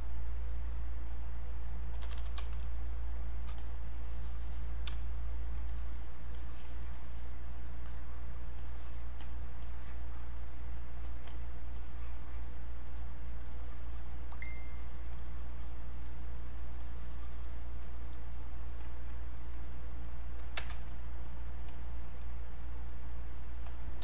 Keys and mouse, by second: 1.6-2.9 typing, 2.7 click, 3.6 click, 4.9 space, 5.3 click, 5.4 space, 5.7-8.6 drag, 8.6 click, 9.2-11.0 drag, 11.6 click, 12.9 click, 14.6 alt+click, 15.2-19.5 drag, 20.9 shift+click.